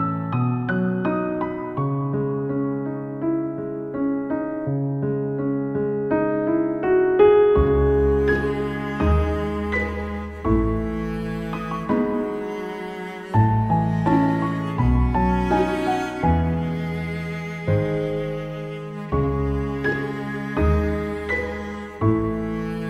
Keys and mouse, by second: 4.8 ctrl+z, 10.6 ctrl+z, 10.7 ctrl+z, 11.5 ctrl+z, 20.4 ctrl+z.